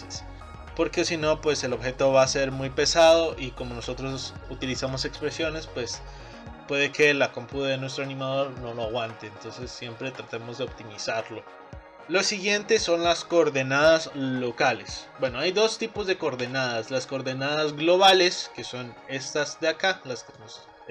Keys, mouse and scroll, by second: 0.4-2.8 scroll up 3, 6.4-8.9 scroll up 6, 11.7-14.2 scroll down 2, 15.5 middle click, 17.1-19.1 middle drag, 19.1-19.6 scroll down 2, 19.6 click.